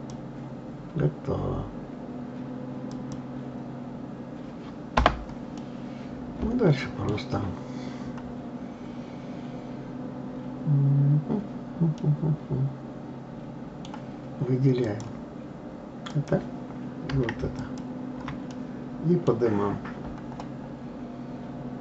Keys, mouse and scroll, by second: 5.6-8.1 middle drag, 8.1-11.1 scroll up 1, 12.0-14.8 middle drag, 14.8 click, 16.0 click, 17.6 shift+click, 18.5-21.5 middle drag.